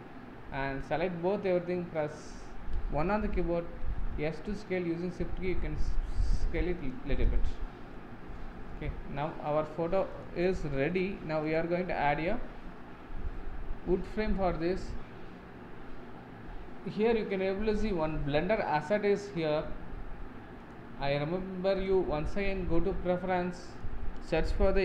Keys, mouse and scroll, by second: 3.1 KP_1, 3.9 s, 7.3-9.0 middle drag, 9.0 scroll up 2, 9.3-10.2 middle drag, 10.2 click, 10.4 scroll down 2, 10.7 middle click, 11.6 click, 12.3-22.0 middle drag, 22.0-24.8 drag.